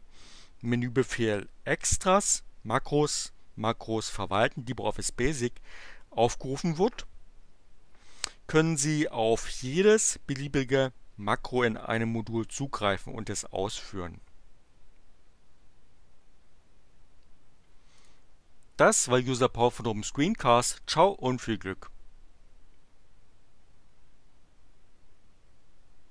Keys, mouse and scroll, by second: 18.0 click.